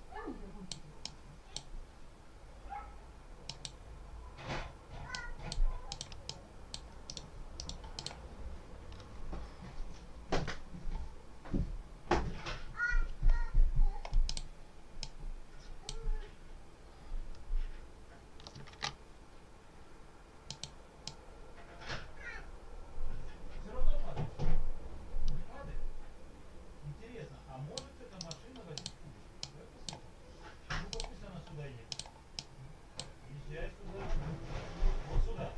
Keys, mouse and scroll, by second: 0.9 click, 3.4 click, 5.0 click, 5.8 click, 6.2 click, 7.0 right click, 7.4 right click, 7.8 click, 14.2 click, 14.9 click, 18.6 ctrl+z, 20.4 click, 21.0-27.8 drag, 28.1 right click, 28.6 click, 29.3-30.0 drag, 30.8 click, 31.8 click, 32.2 click.